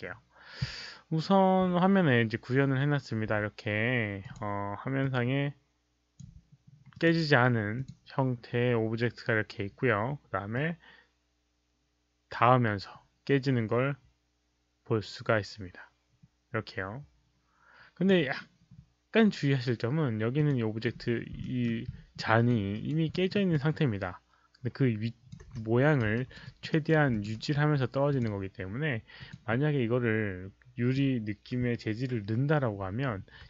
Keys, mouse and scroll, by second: 4.2 click, 4.9-6.1 drag, 6.9 click, 7.7 click, 10.5-18.0 drag, 20.3 click, 20.8-21.1 scroll up 1, 21.4 alt+middle click, 21.8 alt+scroll up 1, 22.1 alt+middle click, 22.7 alt+right click, 23.0 alt+middle click, 23.5-25.2 alt+drag, 23.7 alt+right click, 24.6 alt+middle click, 24.6 alt+right click, 25.6 4, 26.1 alt+right click, 26.4 alt+click, 26.6 alt+right click, 27.0 alt+click, 27.3-28.5 typing, 27.6 alt+right click, 27.6 alt+middle click, 28.0 alt+click, 28.0 alt+right click, 28.0 alt+middle click, 29.1 alt+click, 31.7-32.5 typing, 32.0 alt+click, 32.0 alt+right click.